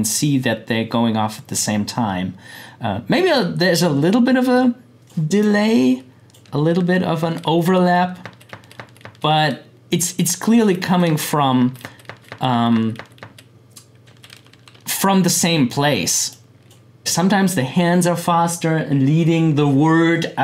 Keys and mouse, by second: 4.5-6.4 drag, 6.4 Right, 10.1 click, 10.5 Right, 14.0 Left, 16.3 click.